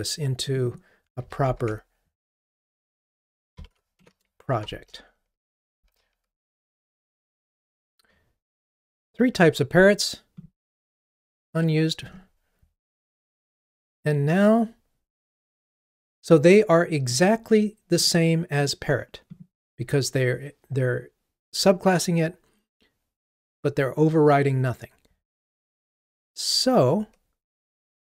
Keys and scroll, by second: 1.2 super+c, 1.7 ctrl+Tab, 2.8 super+v, 5.9 Delete, 5.9 ctrl+r.